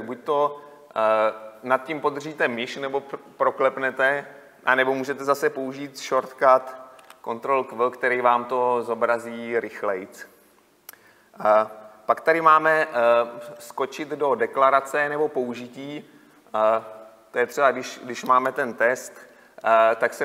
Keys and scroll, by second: 7.2 ctrl+q.